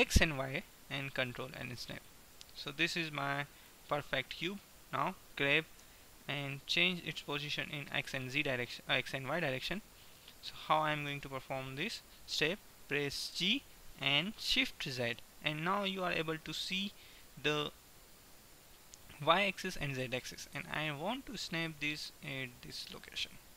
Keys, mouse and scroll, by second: 2.3-5.5 middle drag, 5.8 g, 9.2-10.2 middle drag, 11.2 right click, 11.7-13.0 middle drag, 13.3 g, 23.2-23.5 middle drag.